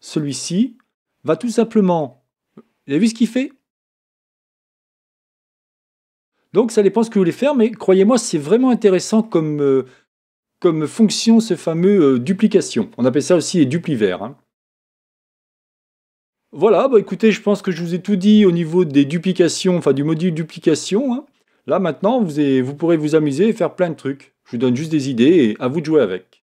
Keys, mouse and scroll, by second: 0.3 click, 1.6-3.2 middle drag, 3.2 scroll up 1, 3.4-4.4 middle drag, 4.6 click, 6.2-6.7 scroll down 1, 6.7-8.5 middle drag, 9.3-10.2 scroll up 1, 10.2-11.9 middle drag, 20.6-22.4 middle drag.